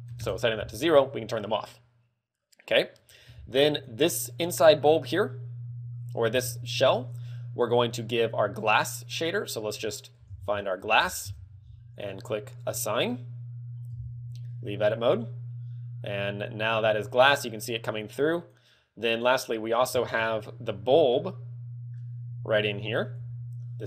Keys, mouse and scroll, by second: 2.4 scroll down 3, 2.8-3.5 scroll up 6, 4.0 right click, 5.1 Tab, 5.9 a, 6.2 l, 8.4 click, 8.7 click, 9.6 click, 12.4 click, 13.5 click, 14.7 Tab, 18.6 right click, 19.5 right click, 20.6 Tab, 21.0 middle click, 22.2 a, 23.1 l.